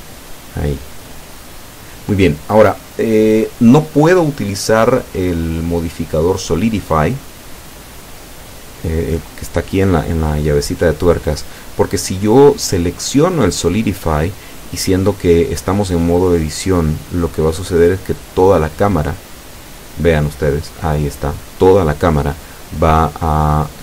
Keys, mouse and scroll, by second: 0.5 shift+right click, 2.1 l, 3.6-4.7 drag, 6.0 z, 6.8-10.5 middle drag, 10.6-11.0 scroll up 1, 19.3-19.7 scroll down 1, 19.9 scroll up 2, 22.4 scroll down 2, 23.2-23.8 middle drag.